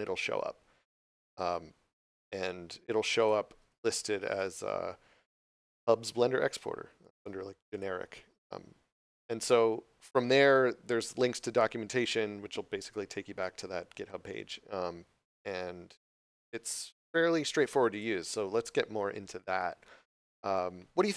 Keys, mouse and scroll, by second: 3.1 click, 4.1 h, 6.9 click, 20.4 click.